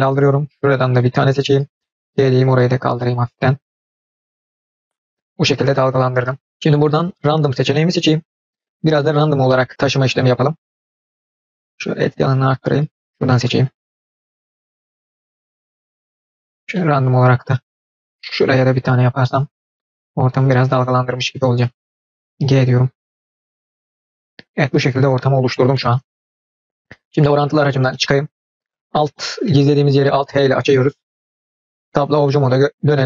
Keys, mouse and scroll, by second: 0.9 click, 1.7 g, 5.0 middle click, 5.0 click, 7.8 click, 8.3 middle click, 9.2 click, 9.5 middle click, 9.8 g, 13.1 click, 13.3 middle click, 13.9 g, 14.3 middle click, 14.8 click, 15.1 g, 16.7-18.0 middle drag, 18.4 click, 19.1 g, 19.9-21.3 middle drag, 21.5 click, 22.2 g, 23.9 middle click, 24.9 click, 27.5 click, 27.9-28.9 middle drag, 29.4 middle click, 30.6 alt+h, 31.4 click, 32.0 Tab, 32.3-33.0 middle drag.